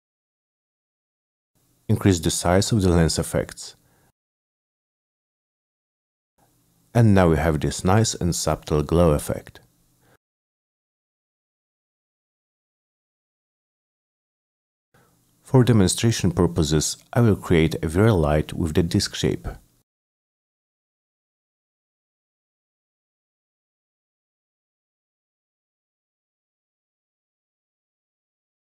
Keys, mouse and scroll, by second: 0.5 middle click, 2.3 click, 4.9 click, 5.0 click, 5.9 Return, 7.0 middle drag, 7.7 middle click, 8.7 middle click, 9.4 middle click, 12.7 click, 13.1 click, 14.4 click, 14.9 click, 15.3 click, 15.7 click, 17.0 click, 17.3 click, 17.4 click, 17.8 ctrl+c, 18.1 click, 19.1 click, 19.6-20.5 typing, 19.8 click, 22.0 click, 22.6 click, 23.2 click, 23.6 click, 24.1 w, 24.3 click, 25.1 middle click, 25.6 click, 26.0 middle click, 26.4 click, 27.4 click, 28.1 middle click.